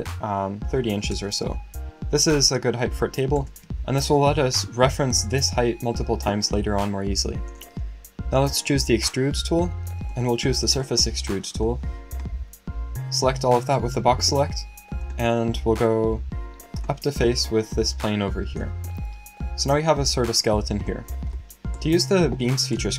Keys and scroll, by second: 0.4-1.3 typing.